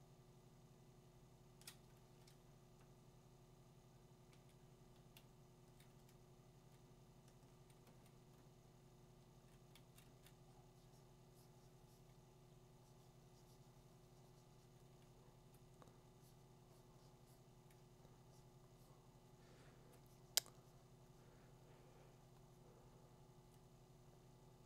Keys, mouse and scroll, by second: 0.0 click, 0.9 click, 1.6 click, 4.3 click, 5.1 [, 5.6 [, 5.7 [, 6.8-10.1 typing, 15.6 click, 19.8 click, 23.5 click.